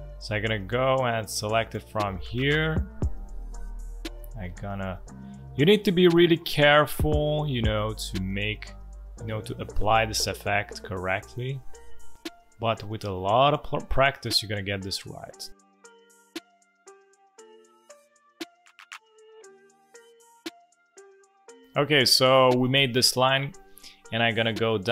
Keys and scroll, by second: 12.1 space, 17.7 space, 19.8-21.7 typing, 23.3 space.